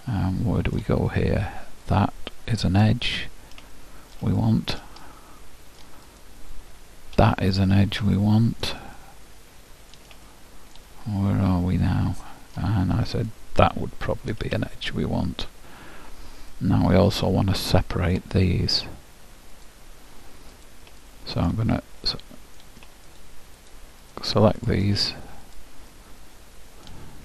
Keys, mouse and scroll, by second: 2.0-3.8 drag, 3.6-5.5 middle drag, 6.3-7.4 drag, 8.5-13.9 middle drag, 13.3-15.1 drag, 15.4 middle click, 15.9-18.7 middle drag, 19.8-22.5 drag, 21.2-23.8 middle drag, 23.3-27.2 drag, 26.1-27.2 middle drag.